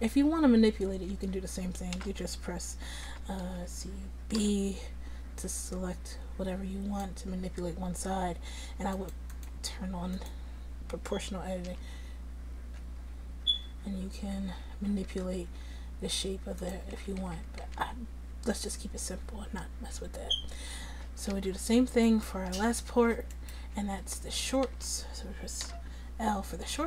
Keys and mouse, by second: 0.7 Tab, 1.2 Tab, 2.0 a, 3.1 a, 3.5 a, 4.4 b, 12.8 g, 17.0 ctrl+z, 17.3 ctrl+z, 17.7 ctrl+z, 21.4 Tab, 22.6 Tab, 22.9 Tab, 23.8 Tab, 24.7 a, 25.6 l.